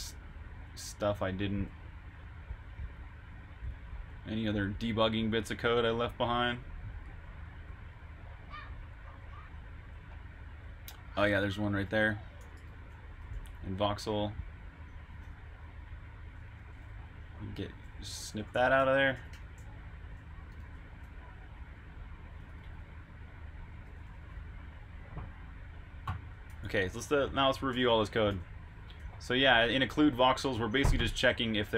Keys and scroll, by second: 0.2-3.4 typing, 8.4-9.1 typing, 13.2 super+j, 13.2 typing, 15.4 super+[, 16.8-24.8 typing, 26.3-31.7 typing.